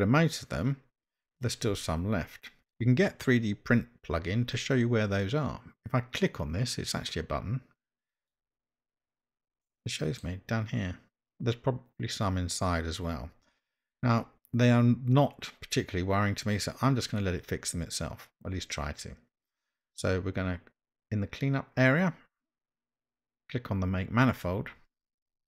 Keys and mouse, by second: 9.7 middle click, 24.4 click.